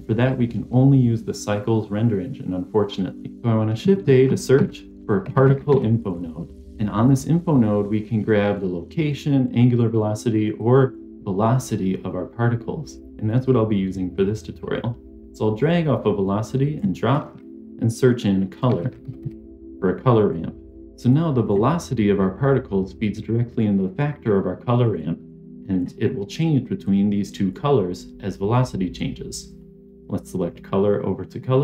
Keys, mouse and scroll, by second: 4.0 shift+a, 10.5 click, 10.9-20.8 drag, 21.0 click, 23.4 click, 24.9 click, 26.8 click, 30.2-31.6 drag.